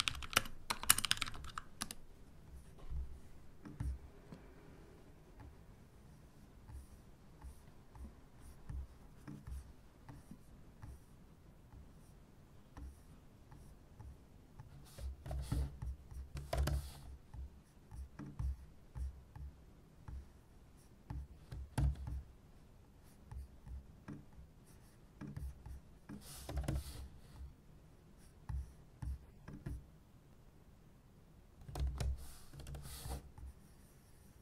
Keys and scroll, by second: 0.0-1.8 typing.